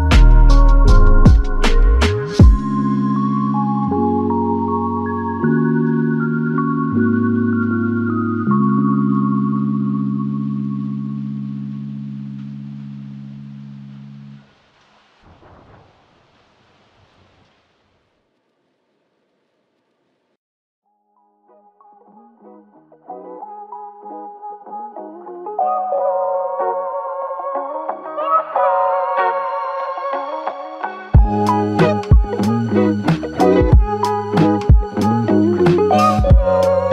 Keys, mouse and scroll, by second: 0.2 ctrl+alt+click, 3.1 shift+click, 4.8 alt+click, 9.2 ctrl+Tab, 11.9 alt+click, 13.2-13.7 alt+scroll down 2, 13.7-15.3 scroll up 1, 21.2 Tab, 22.2 alt+click, 24.5 Tab, 26.9 scroll down 1, 27.6 alt+click, 34.4 scroll down 1, 34.8 scroll up 1.